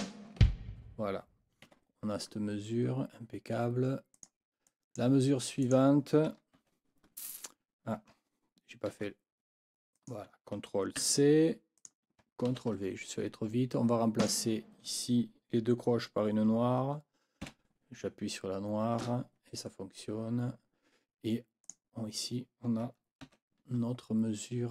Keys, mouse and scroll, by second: 0.0-0.4 typing, 1.6 Escape, 4.1 click, 4.6 click, 5.6 click, 6.6 ctrl+v, 8.9 ctrl+z, 10.0 click, 11.0 ctrl+c, 11.8 click, 12.5 ctrl+v, 14.2 click, 17.4 5, 21.6 click, 23.2 ctrl+v.